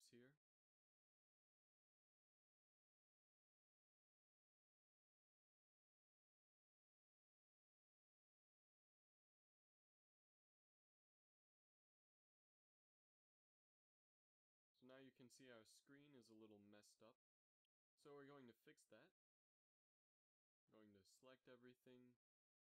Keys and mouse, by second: 2.0 ctrl+r, 5.4 ctrl+r, 8.3 Tab, 8.9 a, 9.1 z, 18.7 KP_1, 19.5 Tab, 19.8 z, 20.6 a.